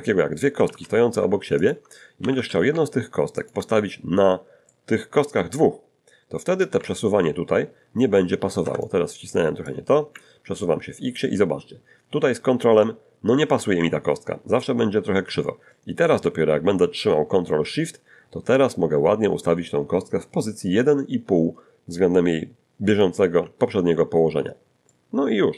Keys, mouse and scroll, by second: 0.6 shift+d, 0.8 x, 1.6 ctrl+shift+click, 2.2 d, 2.5 z, 3.4 ctrl+click, 4.7-5.8 middle drag, 6.6-9.0 ctrl+drag, 8.6 ctrl+Escape, 9.7-23.2 drag, 24.6 middle click, 24.9-25.5 middle drag.